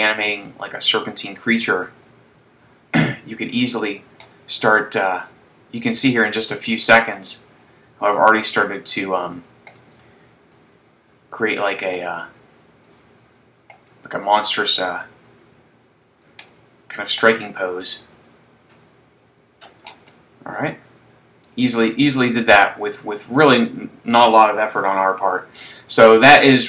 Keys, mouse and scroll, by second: 0.5 click, 2.7 click, 5.2 click, 7.7 click, 10.0 right click, 10.6 click, 12.1 click, 13.7 right click, 15.0 click, 17.2 right click, 18.2 click, 20.4-21.5 scroll down 1, 21.5-22.0 scroll down 1, 22.6 middle click, 25.0 KP_3, 26.2 shift+middle click.